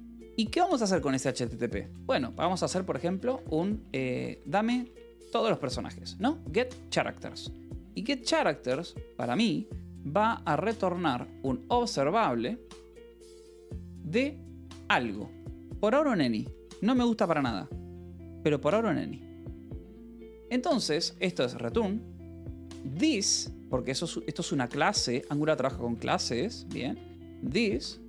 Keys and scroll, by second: 0.1 Return, 1.4-6.2 typing, 8.8-9.1 typing, 11.1 s, 11.7 Return, 14.2 Left, 14.6-16.1 typing, 19.2 space, 19.7 Return, 20.4-24.4 typing, 25.6 Escape, 26.0-28.0 typing, 26.8 Escape.